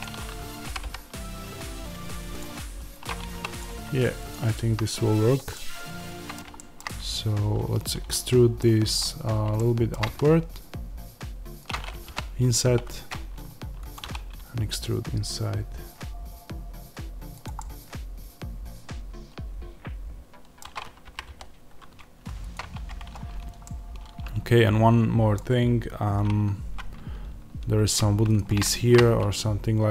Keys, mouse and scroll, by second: 0.6 g, 2.3 click, 3.2 3, 3.4 click, 5.4-11.6 middle drag, 6.9 scroll up 1, 9.9 e, 11.6 click, 12.0 i, 13.9 click, 13.9 e, 17.4 click, 17.5-22.4 middle drag, 21.0 g, 22.4 click, 22.6 Tab, 23.2-23.5 scroll down 1, 23.5-28.2 middle drag, 28.2 shift+right click.